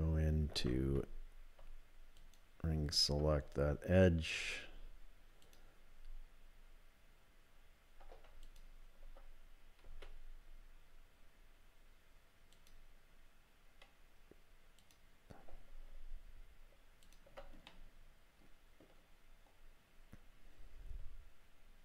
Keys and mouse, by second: 0.5 2, 4.4 s, 5.4-6.9 drag, 8.4 alt+click, 9.9 s, 14.8 click, 17.0 alt+click, 17.7-18.8 middle drag.